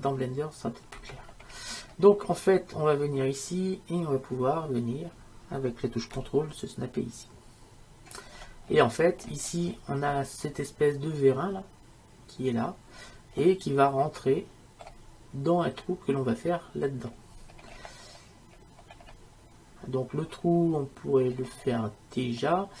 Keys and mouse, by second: 1.7-8.2 middle drag, 8.8 middle click, 10.2-13.5 middle drag, 13.7-17.7 middle drag, 20.5 middle click, 20.7 middle click.